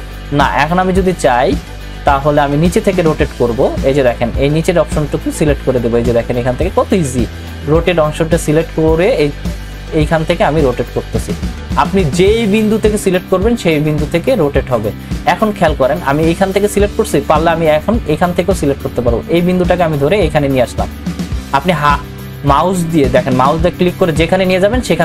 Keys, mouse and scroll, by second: 18.3-23.4 drag, 23.4-25.0 drag.